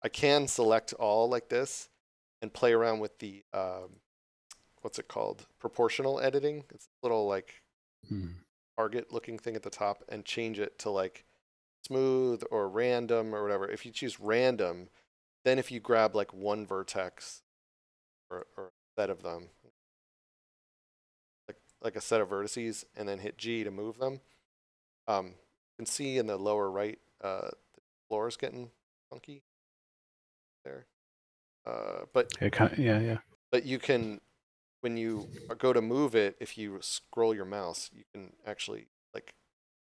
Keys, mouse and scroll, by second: 0.4 shift+middle click, 3.7 click, 9.1 click, 14.1 click, 16.3 right click, 18.3 click, 23.5 g, 32.0 right click, 32.9 scroll down 1, 34.7 g, 36.8 scroll up 1.